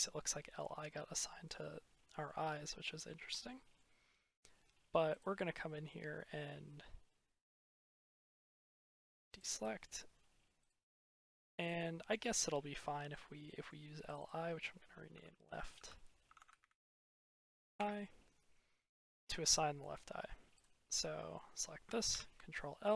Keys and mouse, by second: 0.8-2.1 middle drag, 2.9-3.6 middle drag, 9.2-10.6 drag, 11.2-11.6 drag, 12.6 middle click, 13.3 middle click, 13.5 click, 14.2-17.7 drag, 16.3 BackSpace, 19.4 click, 19.6 middle click, 20.5 middle click, 20.8 middle click, 22.0 ctrl+l.